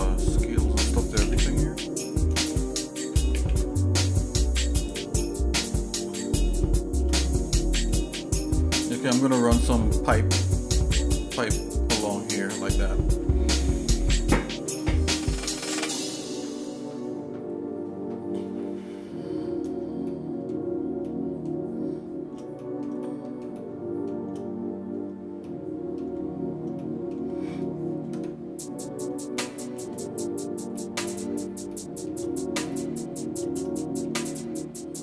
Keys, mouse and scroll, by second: 0.0 scroll down 1, 0.6 middle click, 1.2 a, 3.3 ctrl+a, 5.8 scroll up 1, 6.3 scroll up 2, 6.6 shift+middle click, 8.0 middle click, 8.7 middle click, 20.1 shift+middle click, 21.0 shift+middle click, 22.6 middle click, 23.0 shift+middle click, 23.5 shift+middle click, 25.4 shift+middle click, 26.8 shift+middle click, 28.2 KP_Divide, 29.4 shift+middle click, 30.3-30.6 scroll down 1, 30.8 middle click, 31.7 shift+middle click, 32.7 shift+middle click, 33.8 shift+middle click, 34.5 middle click.